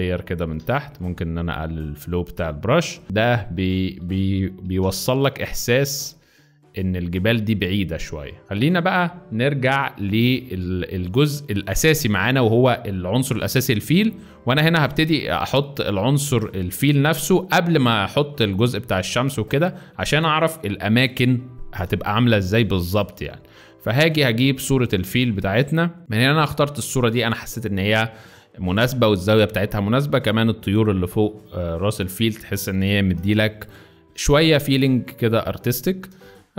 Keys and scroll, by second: 4.7 ], 8.4 z, 19.4 z, 33.5 Return, 34.6 z.